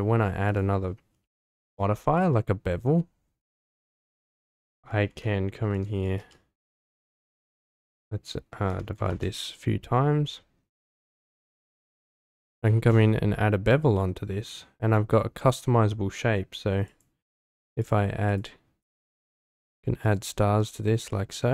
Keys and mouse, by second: 3.5 click, 7.5-9.1 drag, 11.2 click, 11.4 click, 11.7 click, 12.2 click, 12.7-14.4 middle drag, 16.9 click, 17.8 click, 18.3 click, 18.8 click, 19.7 click, 20.0 click, 21.1 middle drag.